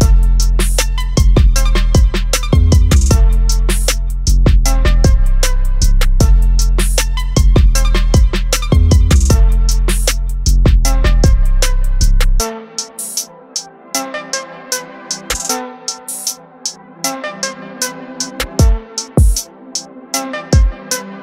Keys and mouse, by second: 13.8 click, 21.1 click.